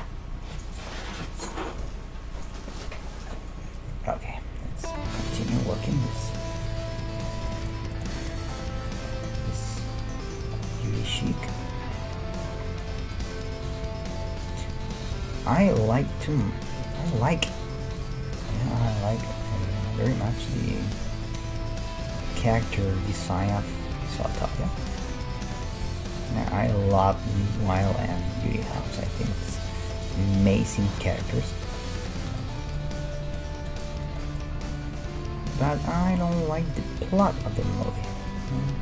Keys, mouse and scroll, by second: 4.6 scroll up 1, 4.8-12.5 middle drag, 6.7 ctrl+Tab, 8.5-10.0 drag, 9.4 e, 10.0 right click, 11.3-13.2 right drag, 11.5 g, 12.7 middle click, 13.4 right click, 13.6-16.7 drag, 13.6 g, 15.1 g, 16.7 middle click, 17.1-19.9 right drag, 18.9 g, 19.9 middle click, 20.6 right click, 22.4 g, 22.9 right click, 23.7-24.7 right drag, 24.8 e, 25.9-27.7 middle drag, 26.9 ctrl+Tab, 28.3 right click, 28.4 f, 28.8 ctrl+Tab, 29.3 right click, 30.8 g, 32.6-35.7 middle drag, 34.5 g, 35.9 right click, 36.2 g.